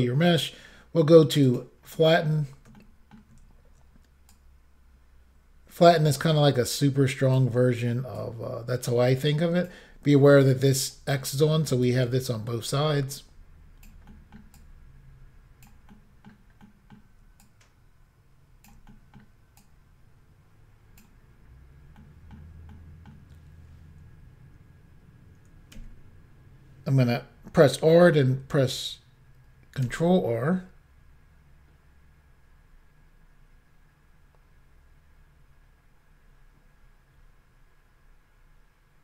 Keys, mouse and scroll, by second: 1.5 click, 2.0 shift+middle click, 2.8 ctrl+middle click, 4.4 click, 7.6 middle click, 8.2 click, 11.3 middle click, 11.9 click, 14.2 middle click, 14.6 click, 16.0 middle click, 16.7 middle click, 17.5 shift+click, 18.9 middle click, 19.6 click, 21.5-22.0 scroll down 1, 22.0 middle click, 22.3-22.7 scroll up 1, 22.7 middle click, 25.8 r, 29.9 ctrl+r.